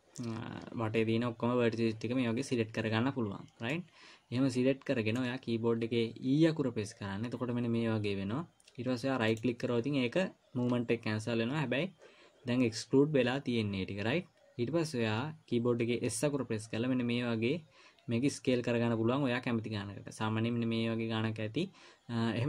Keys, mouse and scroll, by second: 4.1 middle click, 6.7 e, 16.5 s.